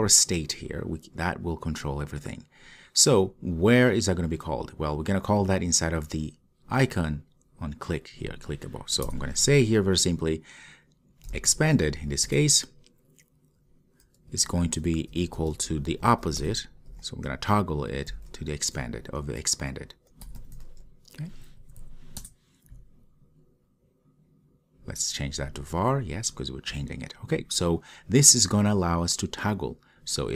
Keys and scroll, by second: 12.3 Return, 22.3 Return.